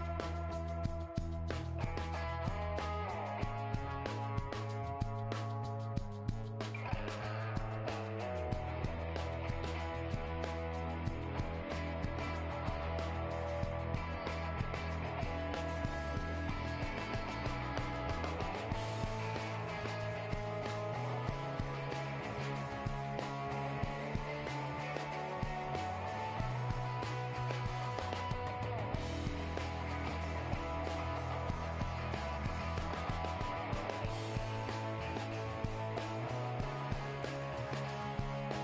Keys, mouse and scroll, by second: 0.5 right click, 0.8 g, 2.3 middle click, 3.3 g, 4.6-5.6 middle drag, 5.0 k, 7.1-8.6 middle drag, 7.9 ctrl+Tab, 8.6 right click, 9.6 f, 10.0 ctrl+Tab, 11.1 g, 12.5 click, 13.0 g, 14.4 g, 15.9 g, 17.5 middle click, 17.9-20.4 drag, 19.0 g, 20.4 middle click, 20.9 click, 21.2-22.7 right drag, 21.4 g, 23.2-25.0 middle drag, 23.7 g, 25.4-29.0 right drag, 25.6 g, 27.9 g, 28.0 middle click, 29.6-33.1 middle drag, 30.9-32.0 right drag, 32.0 alt+m, 32.0 click, 32.9 g, 33.8 middle click, 34.8 g, 36.5-38.6 right drag, 37.4 g.